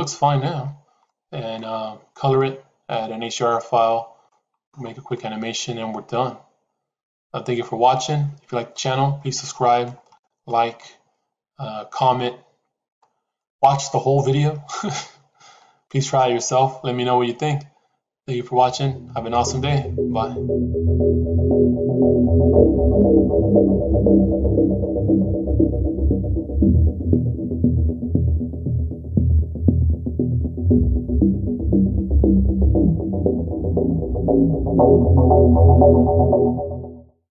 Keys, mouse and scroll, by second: 1.0 middle click, 2.3-4.2 middle drag, 5.1-7.9 middle drag, 8.6-9.7 middle drag, 10.0 shift+middle click, 10.7-12.8 middle drag, 13.3 middle click, 14.8-37.3 middle drag.